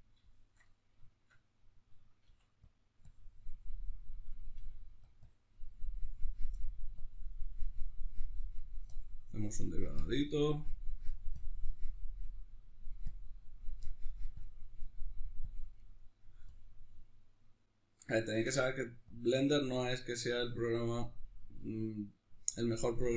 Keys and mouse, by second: 2.3 f, 3.2 click, 4.1-5.1 middle drag, 4.5 f, 5.3-6.5 drag, 6.5 middle click, 7.0-8.5 drag, 8.5 middle click, 8.9-13.8 drag, 13.8 middle click, 14.4-15.9 drag, 15.9 middle click, 16.5-17.7 drag, 17.7-19.1 middle drag, 19.1-22.1 drag, 22.1 middle click, 22.7-23.1 drag.